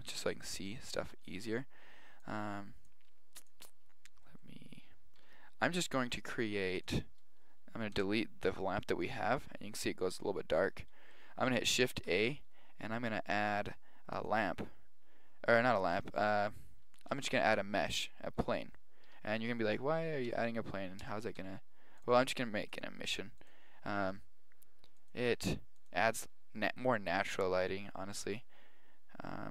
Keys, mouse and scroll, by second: 0.4 KP_7, 1.3 right click, 2.2 click, 3.2-6.4 drag, 8.0 Delete, 8.9 click, 9.3 Delete, 12.1 shift+a, 17.0 shift+a, 19.2 KP_1, 20.4 g, 21.5 r, 22.8-23.7 drag, 26.3-27.7 drag, 28.3-29.5 drag.